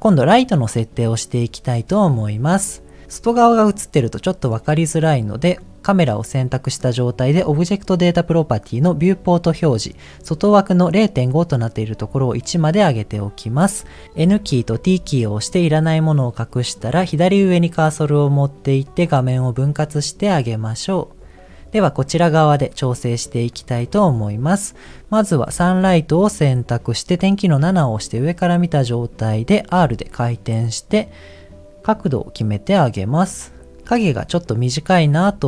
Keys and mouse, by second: 5.3 click, 9.1 click, 11.5 click, 14.2 n, 14.7 t, 18.8-20.3 drag, 21.7 middle click, 23.6 click, 27.6 KP_7, 29.7 r, 35.0 middle click.